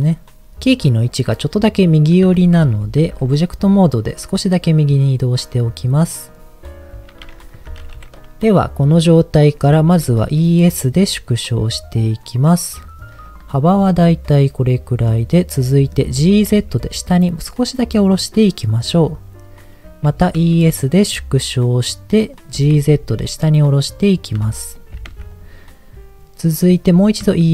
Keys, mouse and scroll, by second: 2.4 Tab, 2.8 g, 3.0 x, 6.3 click, 7.5 Tab, 9.8 e, 10.0 s, 13.3 click, 13.7-15.1 middle drag, 15.7 middle click, 16.1 g, 16.5 z, 18.9 click, 19.3-20.0 scroll up 2, 20.1 e, 20.3 s, 22.3 click, 22.5 g, 22.7 z, 23.7 click, 24.3 s, 24.7 click, 24.9 g, 25.1 z, 25.3 click, 27.1 e, 27.3 s.